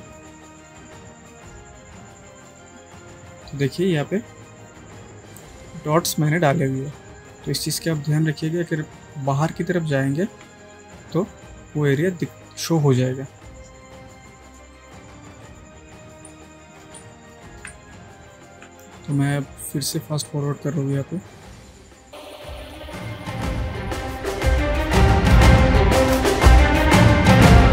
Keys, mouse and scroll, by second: 7.9 shift+Num_Lock, 8.5 alt+click, 10.4 d, 11.3-12.6 drag, 14.8 shift+click, 16.3 space, 16.5-17.1 click, 16.9 space, 17.1-17.8 ctrl+click, 17.5 ctrl+space, 17.9-18.5 click, 18.5 space, 19.2 space, 19.3-20.0 click, 20.6-21.5 ctrl+drag, 22.7 x, 22.8-23.1 click, 23.9 space, 24.0 click, 24.9 space, 25.0 click, 26.2 alt+right click, 26.4-26.9 click, 26.7 space, 26.8-27.2 drag.